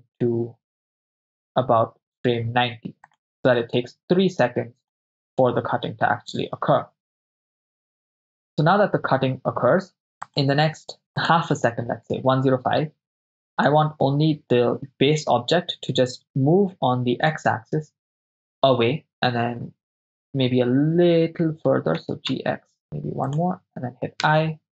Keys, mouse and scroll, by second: 0.0 g, 3.1 click, 3.7-5.0 drag, 5.3 shift+space, 9.9 shift+space, 10.5 click, 11.3 click, 13.7 right click, 17.3 g, 17.3 x, 19.1 ctrl+click, 22.1 g, 22.4 x, 23.3 ctrl+click, 24.3 i.